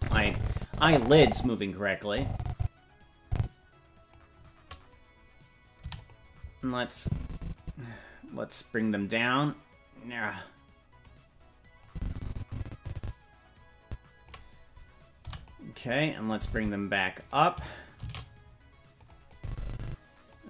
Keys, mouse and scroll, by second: 5.8 i, 7.0 click, 8.9-11.1 drag, 11.9-14.3 drag, 15.2 i, 16.3 click, 17.2 right click, 18.0 shift+d, 19.3-20.4 drag.